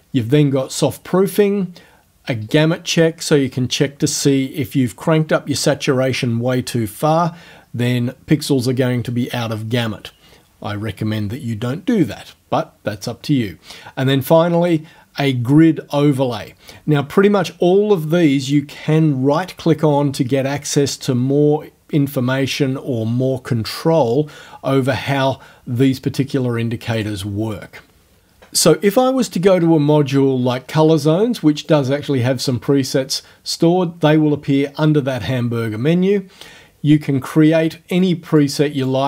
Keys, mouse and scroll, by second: 2.5 click, 12.1 click, 14.7 click, 18.5 right click, 25.2 click, 27.0 click, 31.7 click, 38.1-38.6 drag, 38.8 click.